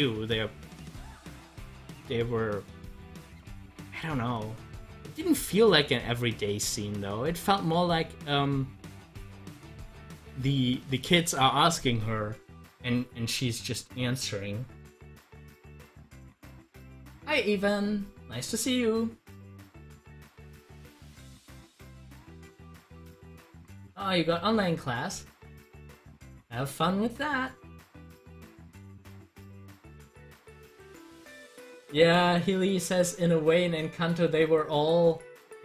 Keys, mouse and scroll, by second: 0.8-5.0 drag, 30.8 click.